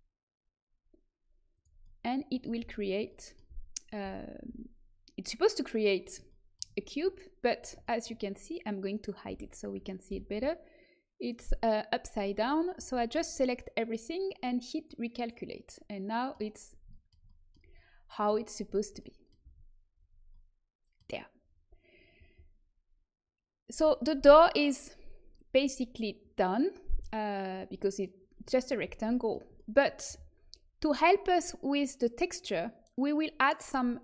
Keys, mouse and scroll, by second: 1.8 middle click, 2.5 z, 3.4 z, 3.9 z, 4.3 a, 9.2 l, 10.0 h, 12.7 a, 14.7 click, 15.3 middle click, 16.0 click, 16.4-19.2 middle drag, 19.4 a.